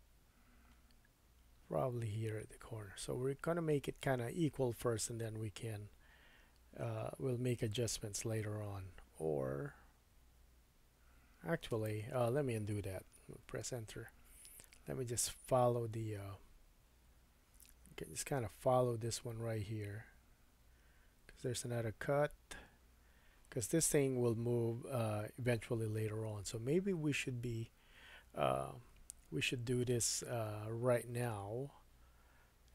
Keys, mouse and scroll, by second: 15.3 super+z, 24.8-32.7 middle drag.